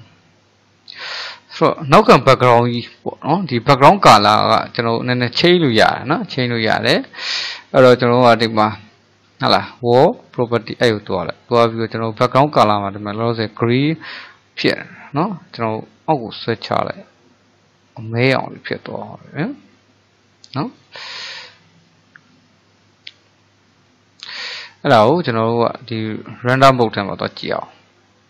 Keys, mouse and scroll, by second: 5.4-9.5 middle drag, 10.5 click, 14.6 click, 19.7-20.8 middle drag, 20.8 click, 23.0-27.0 middle drag, 27.0 click.